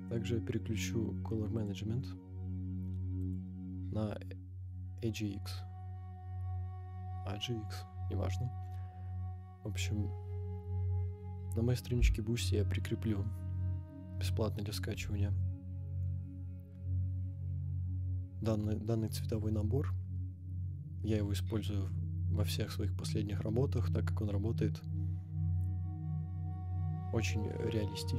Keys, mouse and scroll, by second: 0.2-1.6 scroll down 5, 1.6 click, 2.0 scroll down 2, 3.2-28.1 drag.